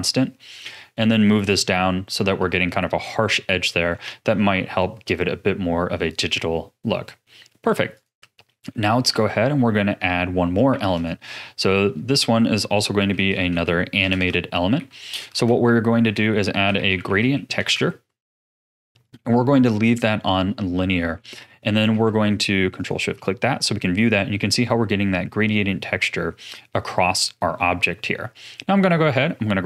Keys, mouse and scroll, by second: 3.0-3.7 scroll down 3, 3.7 middle click, 4.3-4.8 scroll down 1, 4.8 click, 6.3-7.0 scroll down 10, 7.0 middle click, 7.9 ctrl+shift+click, 8.5-9.1 middle drag, 9.1 ctrl+s, 9.5-10.7 middle drag, 10.7 shift+a, 14.1 BackSpace, 15.3 BackSpace, 19.4-20.1 scroll up 4, 20.1 scroll down 1, 20.1-20.6 scroll up 1, 20.6-22.8 middle drag, 22.8 ctrl+shift+click, 23.6-26.5 scroll down 5, 27.5-28.3 middle drag, 28.3 click.